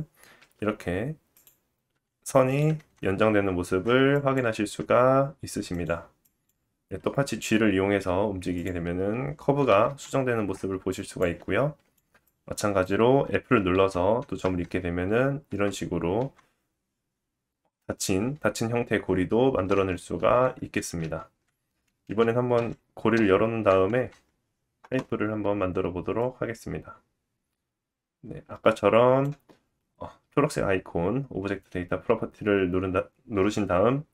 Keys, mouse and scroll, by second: 1.9 e, 2.8 Tab, 3.7 Tab, 4.2-5.9 drag, 4.8 e, 5.9 middle click, 6.2-8.7 drag, 7.4 g, 8.7-10.9 middle drag, 9.9 Tab, 10.4 Tab, 10.9-19.2 drag, 13.8 f, 14.4 Tab, 15.5 Tab, 19.6 Tab, 20.2 ctrl+z, 21.0 ctrl+z, 22.6 ctrl+z, 24.0 Tab, 26.2 click, 29.3-34.1 drag.